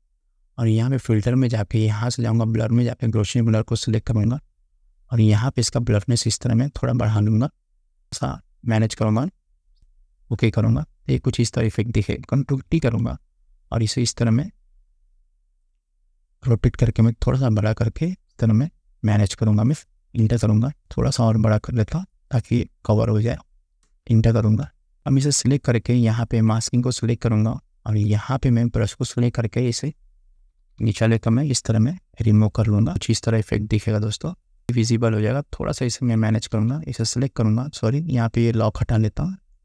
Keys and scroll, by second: 12.7 ctrl+t, 20.3 Return, 23.9 Return, 24.7 space, 27.1 space, 30.5 ], 36.6 ctrl+z.